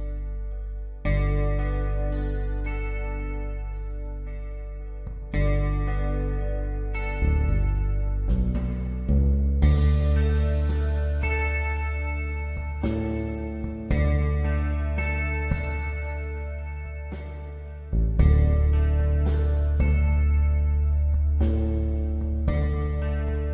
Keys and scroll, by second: 0.8 space, 4.9-8.1 typing, 14.3-14.7 typing, 18.5-19.3 typing, 21.6-22.4 typing.